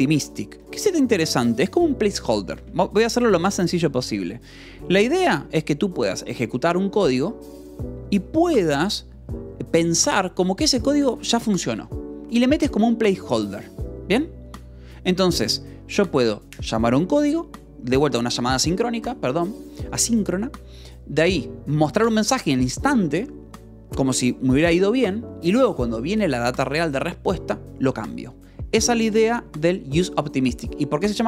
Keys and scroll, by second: 0.5 Escape, 1.0 j, 1.6 k, 2.9 j.